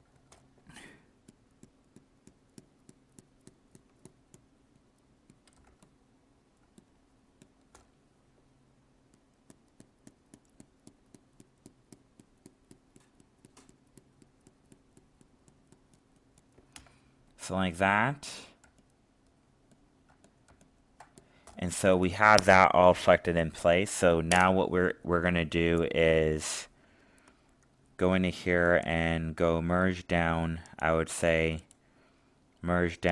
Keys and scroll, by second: 5.6 alt+space, 18.6 alt+space.